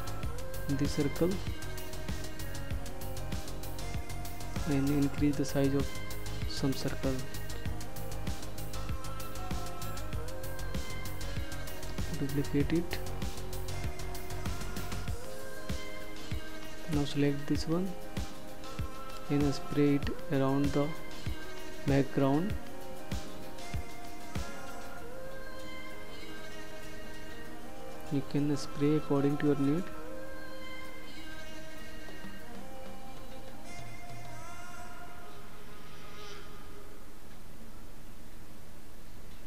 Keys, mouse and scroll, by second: 3.3 shift+click, 6.0 ctrl+d, 15.5 click, 30.9 click.